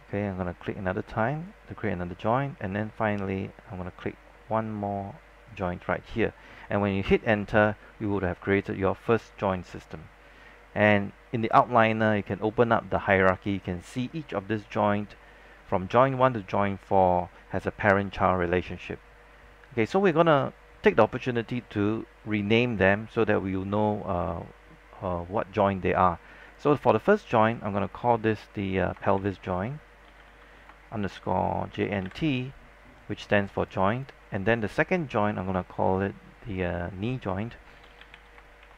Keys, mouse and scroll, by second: 7.2 Return, 12.4-28.4 drag, 29.0-32.8 typing, 33.8 click, 37.7-38.7 typing.